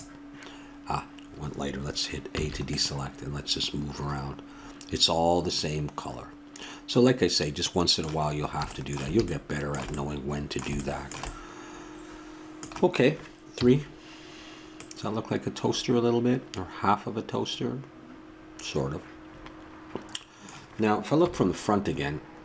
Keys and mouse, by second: 2.3 a, 9.5-13.5 middle drag, 13.5 KP_3, 21.2 KP_1.